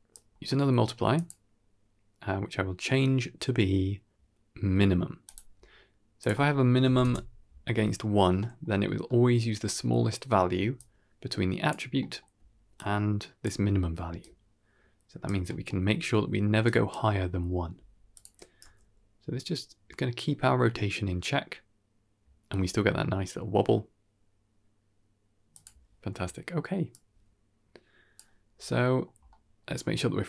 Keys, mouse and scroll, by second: 0.0-0.6 drag, 1.1-1.4 drag, 1.7-2.0 scroll up 4, 2.0-2.4 middle drag, 2.6-5.3 drag, 6.1 click, 8.1 scroll down 1, 8.3 middle click, 8.9 middle click, 10.4 d, 10.6-11.6 drag, 11.6 d, 11.9 middle click, 12.2 d, 12.6-13.3 drag, 13.3 d, 13.9 d, 14.1-15.1 right drag, 15.1 d, 15.4 middle click, 15.9 scroll down 1, 16.0 middle click, 16.4 d, 16.5 right click, 18.0 click, 18.5 g, 27.6-28.8 drag, 29.2-30.2 scroll down 6, 29.4 middle click, 30.0 middle click.